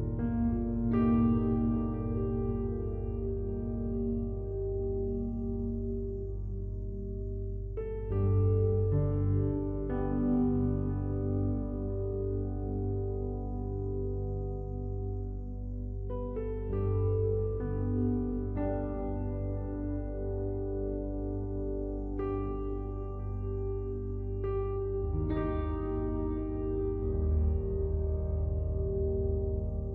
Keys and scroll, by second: 9.5 ctrl+u, 13.4 ctrl+t, 21.2 ctrl+l.